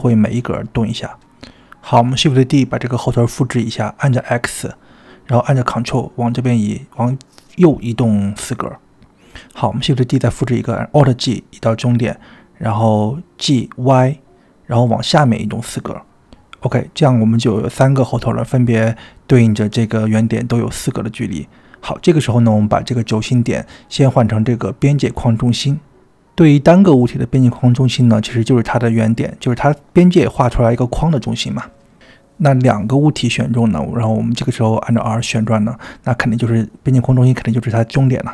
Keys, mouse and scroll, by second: 0.0-0.4 typing, 2.9 shift+d, 8.7-9.4 typing, 10.6 alt+g, 13.5 g, 19.2-20.2 middle drag, 20.6-21.0 shift+middle drag, 21.2-22.9 middle drag, 23.5-25.2 drag, 25.6-26.2 middle drag, 26.2 middle drag, 27.0 click, 29.5 r, 32.1 click, 33.3-34.0 middle drag, 34.8-35.3 drag, 37.2 r.